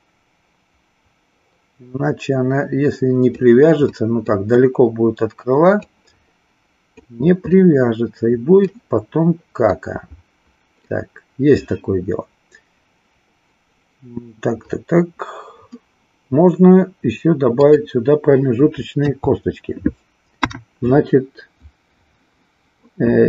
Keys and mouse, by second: 3.9 middle click, 5.9 click, 7.4-8.9 middle drag, 9.8-10.9 middle drag, 18.9 KP_3, 20.3 KP_1.